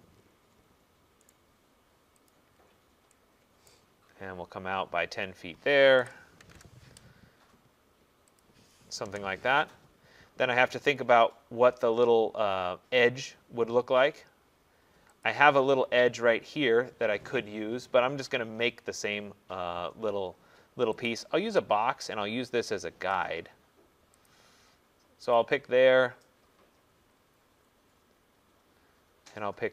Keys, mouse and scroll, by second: 0.0 right click, 0.2 middle click, 0.3 middle click, 0.3 middle click, 0.7 middle click, 1.3 right click, 1.3 middle click, 2.3 click, 2.6 middle click, 3.7 right click, 6.0-7.4 typing, 6.6 Return, 8.4 click, 9.1 Return, 10.5 middle click, 15.3 click, 21.1 click, 21.7 middle click, 21.7 middle click, 21.8 middle click, 22.0 middle click, 22.1 middle click, 24.3 click, 24.3-25.4 scroll, 25.4 click, 25.7-26.2 scroll, 26.7-27.5 scroll, 27.7-28.3 scroll, 28.3-29.0 scroll.